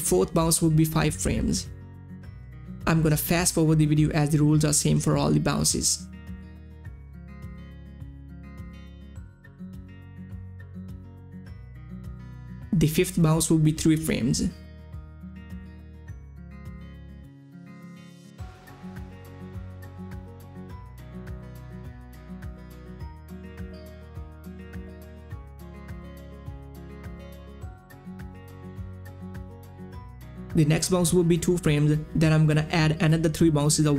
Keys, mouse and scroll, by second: 0.8-2.6 drag, 2.6 Page_Down, 3.7 click, 5.8-12.1 drag, 12.3-13.5 drag, 14.6 Page_Down, 15.2-31.2 drag, 31.2 Page_Down, 31.8 click, 32.6 click.